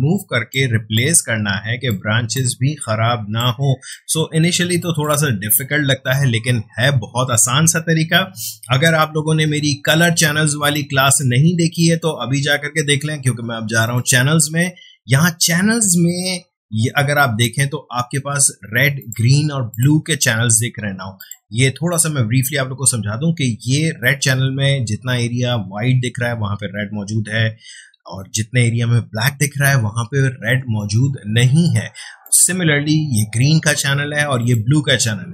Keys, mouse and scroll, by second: 2.3-7.5 ctrl+drag, 13.8 click, 19.0 click, 32.2 click.